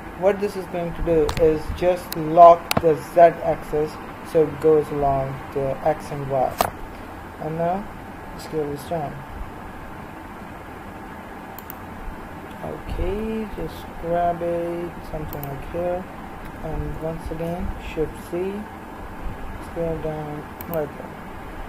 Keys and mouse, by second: 13.1 g, 16.4 s.